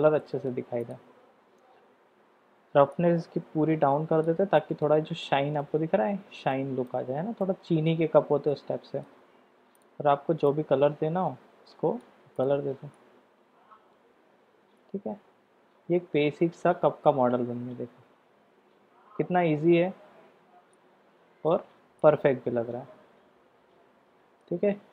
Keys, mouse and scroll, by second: 0.1 middle click, 0.9 click, 2.9-4.3 drag, 4.6 middle click, 5.2 middle click, 6.5-6.9 middle drag, 7.4-7.9 middle drag, 8.5-9.1 middle drag, 9.8 drag, 12.3 click, 13.0-21.5 middle drag, 22.0-24.5 middle drag.